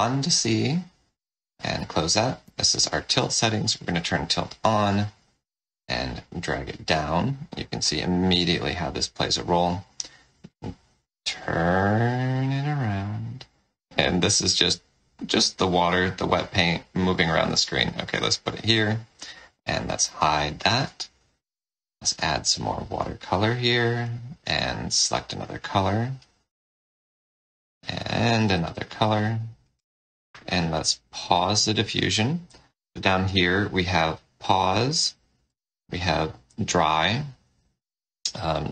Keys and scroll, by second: 1.7 F12, 2.3 ctrl+l, 19.9 ctrl+l, 31.3 d.